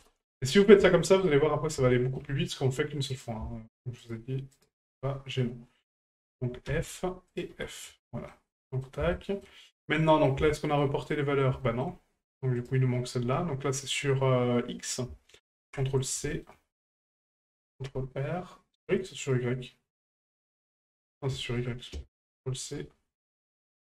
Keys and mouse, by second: 0.9 shift+middle drag, 1.9 shift+middle drag, 3.1 right click, 4.0 shift+right click, 4.5 shift+right click, 7.3 right click, 8.0 shift+middle drag, 8.5-8.8 middle drag, 9.1 shift+middle drag, 10.1 middle drag, 10.5 shift+middle drag, 11.0 middle click, 11.6 shift+middle click, 12.6 right click, 14.9-16.1 ctrl+drag, 16.3 shift+middle click, 20.6 right click, 21.6-22.8 drag.